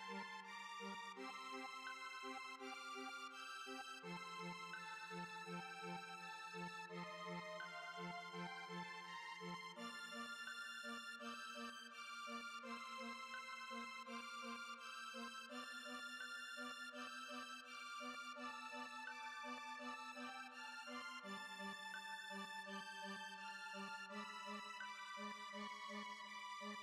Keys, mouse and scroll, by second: 2.8 click, 3.1 space, 4.0-4.5 drag, 4.5-9.2 middle drag, 11.6 space, 12.5-14.9 shift+middle drag, 14.9-16.0 drag, 16.0-16.5 shift+middle drag, 16.5 scroll down 1, 16.5-17.9 middle drag, 17.9 click, 20.0 click, 23.6-24.3 drag.